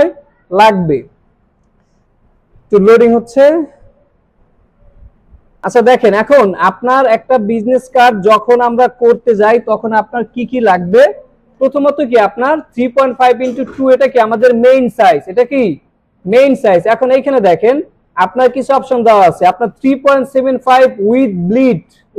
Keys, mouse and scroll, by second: 5.6 click.